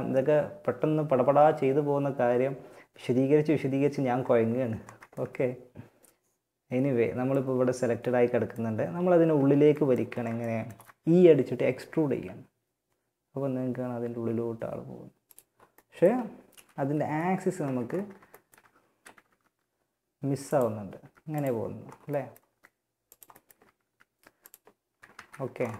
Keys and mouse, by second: 5.9 click, 11.4 e, 15.7 KP_3, 16.3 KP_1, 16.7 z, 17.5 click, 18.4 g, 20.2 g, 21.7 g, 22.7 z, 22.9 g, 24.3 ctrl+z, 24.7 click.